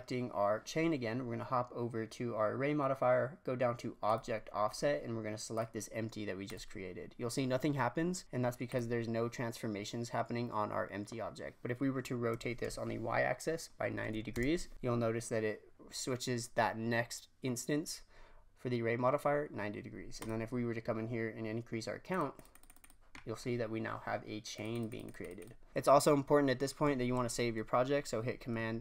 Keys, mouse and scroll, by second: 4.0 click, 4.6-5.5 drag, 8.6 click, 12.3 r, 14.7-17.7 scroll down 3, 20.1 click, 22.0-23.1 drag, 23.1-24.2 scroll down 7, 24.2-24.5 scroll down 2, 24.5-25.7 drag.